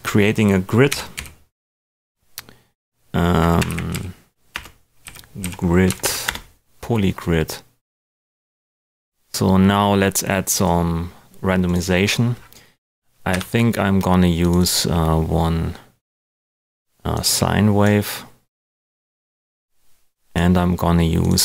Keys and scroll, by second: 0.8 g, 1.1 i, 3.4-5.4 typing, 5.8 Down, 6.2 Return, 13.3 Delete.